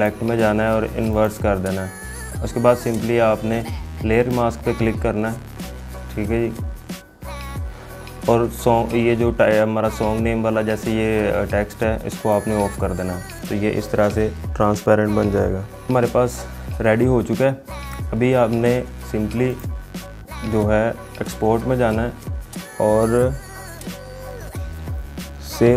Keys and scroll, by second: 15.9 ctrl+0.